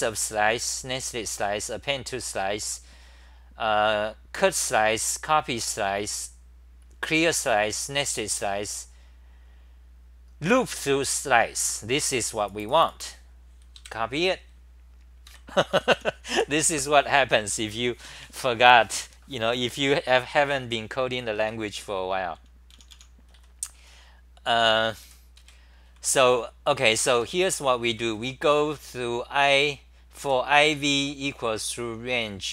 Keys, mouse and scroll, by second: 15.3 ctrl+g, 16.1-16.8 typing, 21.4 c, 21.7 v, 22.7-26.7 typing, 27.8 Tab, 27.8 r, 28.0 r, 29.5-31.7 typing.